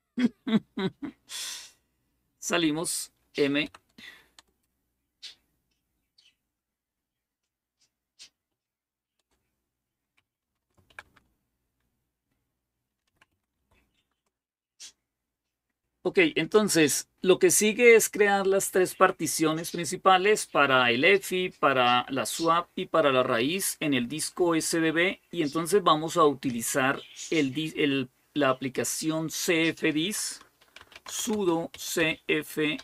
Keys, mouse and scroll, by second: 3.4 m, 4.1 Return, 6.0 typing, 8.1-11.2 typing, 12.5-13.9 typing, 30.4-32.8 typing.